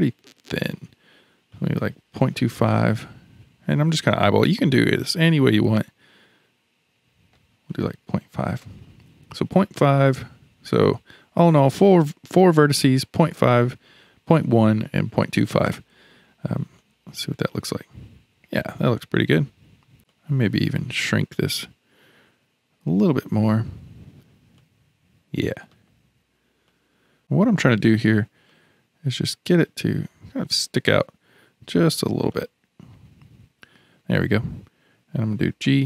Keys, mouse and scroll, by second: 1.5-7.5 drag, 7.7-10.7 drag, 16.8-19.9 middle drag, 20.1-23.2 drag, 24.6-26.7 middle drag, 26.7 click, 28.5-31.5 drag, 32.3-35.3 middle drag, 35.3 g.